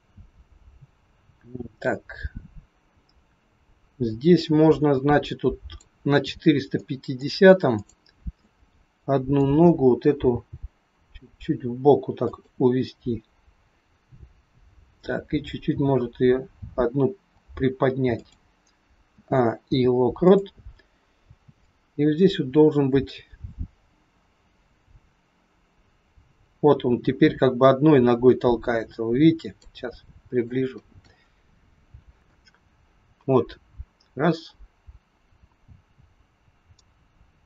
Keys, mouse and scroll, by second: 6.7 middle click, 7.7 click, 8.5 middle click, 10.2 g, 15.7 g, 19.1 a, 19.5 i, 21.7 click, 29.9-30.6 scroll up 4, 30.3 shift+middle click, 31.8 KP_3, 32.3 click.